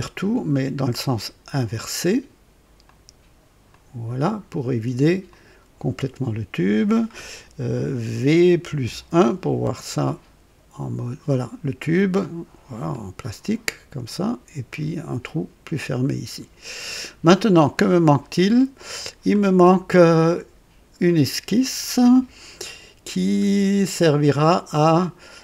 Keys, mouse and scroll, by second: 1.0 click, 2.8 click, 3.7 click, 5.2 click, 8.6 v, 8.8 KP_1, 9.0 KP_1, 10.0-14.2 drag, 14.7-17.9 drag, 18.7 click, 19.8 scroll up 1, 20.3-21.0 right drag, 21.8 click, 22.7 scroll down 1, 23.4-23.8 scroll up 1.